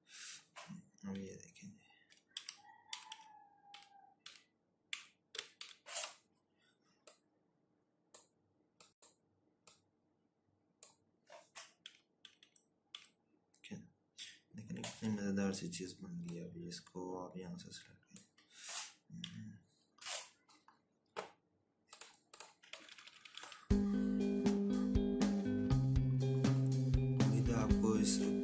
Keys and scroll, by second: 0.4 Right, 2.3 Up, 2.9 Down, 3.4 Down, 4.1 Left, 4.8 Down, 10.6 Right, 11.2 Right, 21.0 Up, 21.0 ctrl+-, 21.2 ctrl+-, 21.4 ctrl+-.